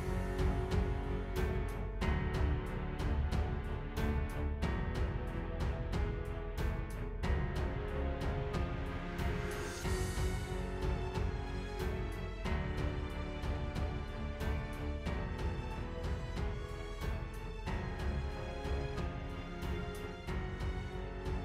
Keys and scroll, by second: 0.7 shift+super+i, 1.2 super+z, 3.9 super+[, 8.5 space, 8.8 space, 9.5 ⟲, 12.4-14.2 typing, 21.1 space.